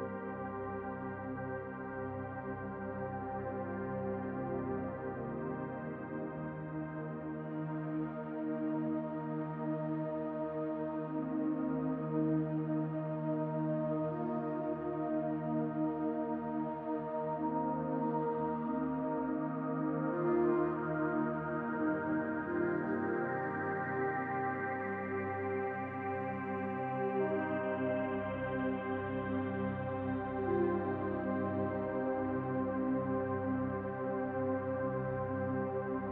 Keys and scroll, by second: 0.0-1.3 typing, 7.9-10.8 typing, 11.3 Return, 19.6 ctrl+z, 28.7 BackSpace.